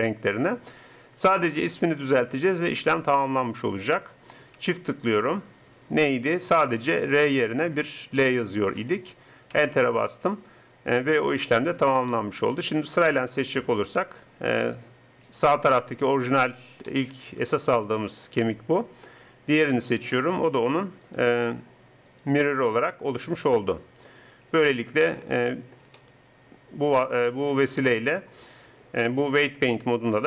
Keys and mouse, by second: 2.5-7.1 drag, 7.1 BackSpace, 7.4 BackSpace, 7.9 BackSpace, 12.1 click, 24.7 middle click.